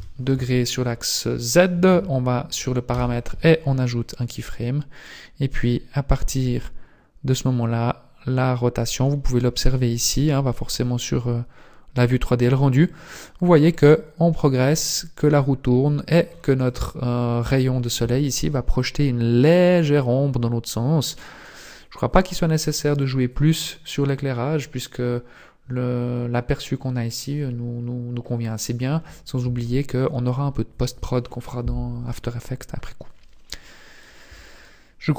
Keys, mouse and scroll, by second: 2.9 i, 5.0 click, 5.8 click, 9.2-9.7 scroll up 4, 9.7 shift+middle click, 12.8 click, 13.6 click, 18.7 scroll up 1, 21.2 click, 21.2 scroll up 1, 27.8-28.3 scroll down 1.